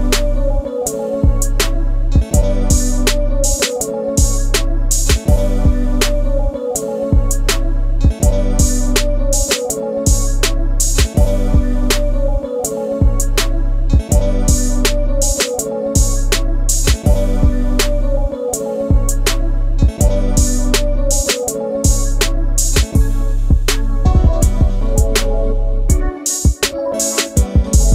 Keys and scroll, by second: 0.3-1.8 typing, 6.1-7.4 typing, 9.3 typing, 9.8 Return, 11.8 alt+t, 14.8 ctrl+space, 17.5 alt+t, 27.0 Escape.